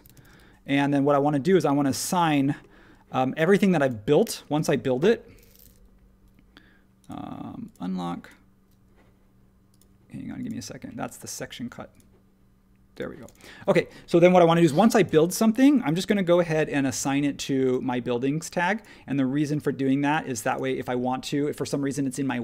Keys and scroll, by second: 0.7 Return, 16.0 super+g.